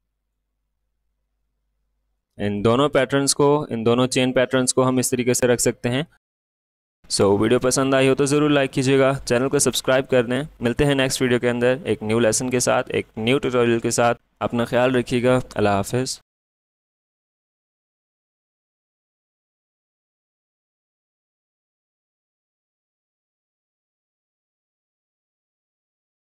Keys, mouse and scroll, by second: 5.8 space, 6.0 click, 6.0 click.